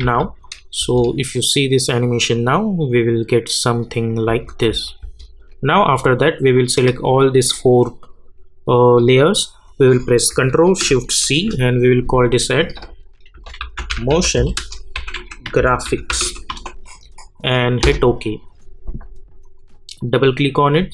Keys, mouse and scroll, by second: 0.0 u, 0.4 click, 0.8 space, 4.3 space, 6.5 click, 10.3 shift+click, 11.2 ctrl+shift+c, 13.1-17.0 typing, 17.8 Return, 19.4 click.